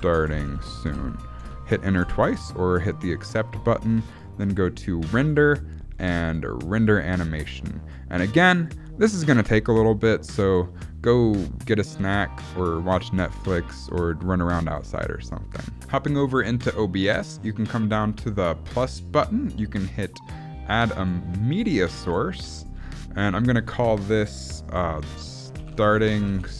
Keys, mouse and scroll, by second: 5.1 click.